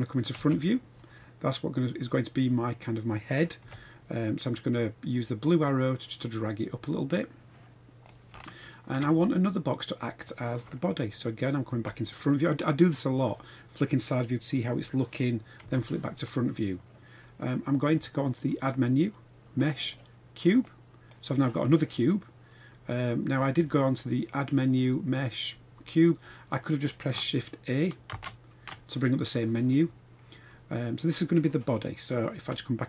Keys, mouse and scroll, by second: 0.3 KP_1, 1.2-1.5 scroll up 3, 2.1-2.9 middle drag, 3.5 KP_1, 5.6-8.1 drag, 8.3-8.9 shift+middle drag, 9.2-10.2 middle drag, 11.7 KP_1, 13.5-14.7 middle drag, 15.6 KP_1, 16.5-18.5 scroll down 3, 18.7-20.7 drag, 22.1-23.3 drag, 24.3-26.3 drag, 28.1 shift+a, 30.2-31.1 middle drag, 32.5 KP_3.